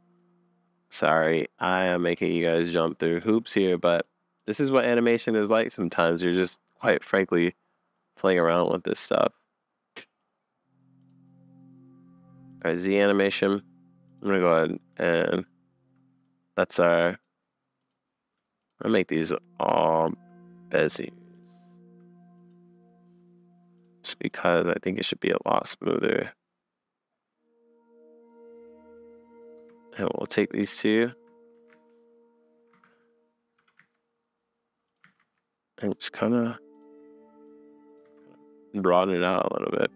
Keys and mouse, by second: 1.3 drag, 3.6 click, 7.6 middle click, 9.2-10.2 drag, 11.0 click, 12.5 click, 14.1 click, 16.2 click, 17.8 click, 18.6 shift+click, 19.6 shift+click, 22.4-23.8 drag, 24.4-24.9 middle drag, 25.4 middle click, 25.6 space, 29.6 space, 30.2 click, 31.0 shift+click, 31.5 s, 33.6 g, 35.1 s, 37.5 middle click, 38.1 space.